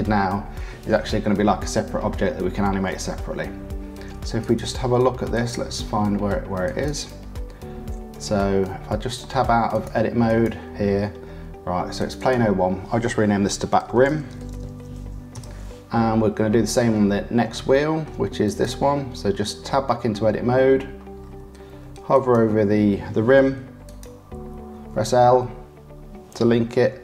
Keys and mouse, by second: 4.3 click, 5.3 click, 6.6 click, 6.9-8.9 middle drag, 8.9 Tab, 9.2 middle click, 9.8 middle click, 10.4-11.9 middle drag, 12.1 middle click, 15.8-16.8 middle drag, 17.7 shift+middle click, 18.4 middle click, 20.7 Tab, 22.1 middle click, 23.8 click, 24.7 l.